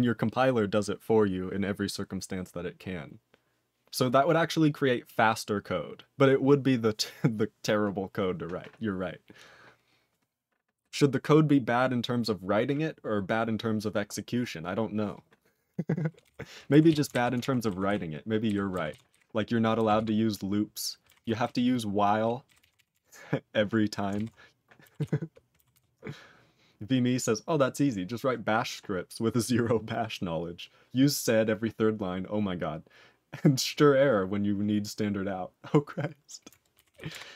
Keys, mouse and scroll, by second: 16.2 ctrl+n, 16.9 ctrl+s, 17.1 ctrl+alt+b, 17.4 ctrl+alt+f, 17.9 ctrl+s, 18.5 ctrl+n, 18.9 ctrl+s, 19.1 ctrl+b, 20.0 ctrl+s, 21.2 ctrl+s, 21.4-22.2 ctrl+n, 22.5 ctrl+n, 22.6 ctrl+f, 22.7 ctrl+f, 22.9 ctrl+f, 24.1 ctrl+alt+f, 25.7 ctrl+s, 36.9 ctrl+s, 37.1 ctrl+f.